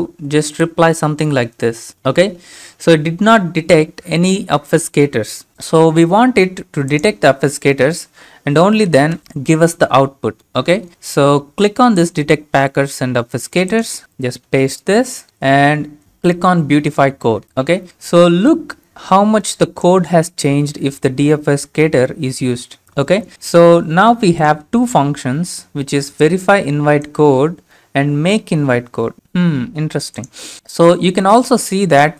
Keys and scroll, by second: 8.1 ctrl+a, 9.2 BackSpace, 14.5 ctrl+v.